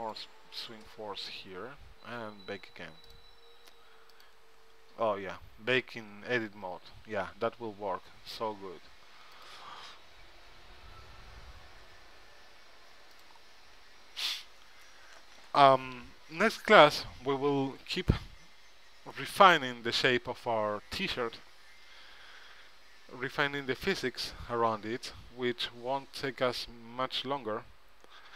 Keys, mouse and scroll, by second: 0.2-1.9 drag, 3.2-8.4 drag, 7.5 Tab, 9.5-11.6 drag, 13.3-28.3 drag.